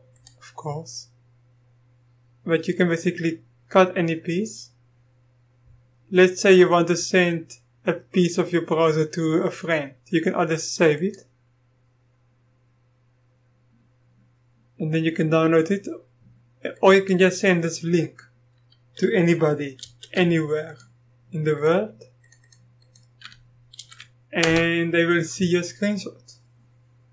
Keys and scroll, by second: 19.8 ctrl+c, 23.7 ctrl+v, 24.4 Return.